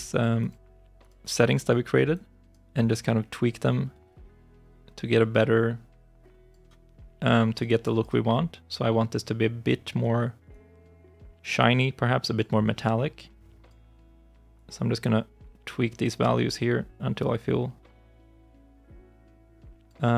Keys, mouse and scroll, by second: 8.1-9.6 scroll up 1.